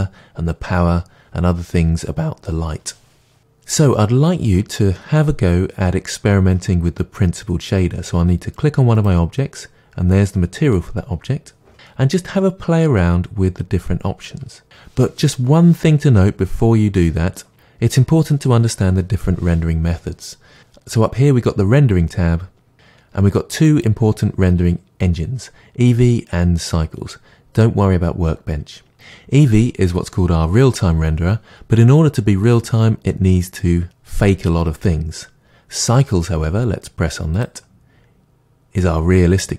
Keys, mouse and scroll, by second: 14.4-39.5 drag.